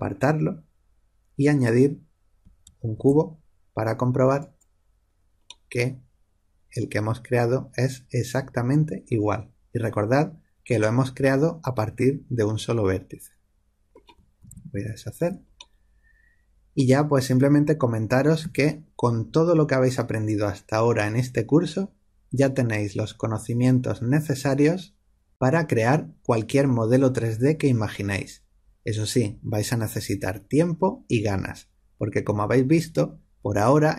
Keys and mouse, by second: 0.1-2.1 drag, 2.9 shift+a, 5.4-7.8 middle drag, 14.4 ctrl+z, 14.7 ctrl+z, 15.5-18.3 middle drag, 18.3 a.